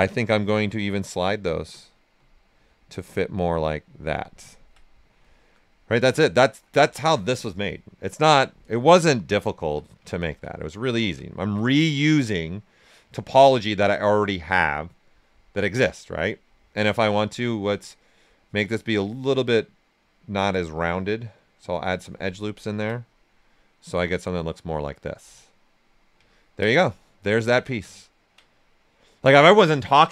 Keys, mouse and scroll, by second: 2.1-4.2 drag, 4.2 ctrl+right click, 5.5 right click, 8.1 right click, 9.2 ctrl+right click, 10.8 alt+right click, 11.6 right click, 13.6-15.3 ctrl+right drag, 15.3-17.2 right drag, 17.2 space, 20.0 click, 21.2 click, 22.4 ctrl+right click, 22.9-26.3 right drag, 23.9 typing, 28.5 right click.